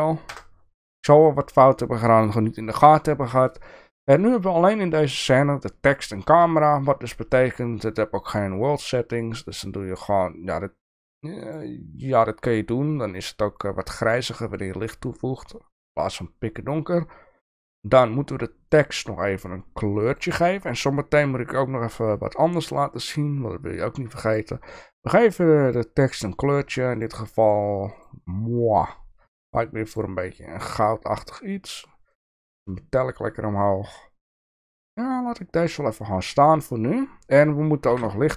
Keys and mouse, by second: 0.3 KP_0, 2.8-3.4 shift+middle drag, 7.2 click, 11.5 click, 20.0 click, 26.9 click, 28.2-30.3 drag, 32.2 click, 36.4 click, 37.9 KP_7.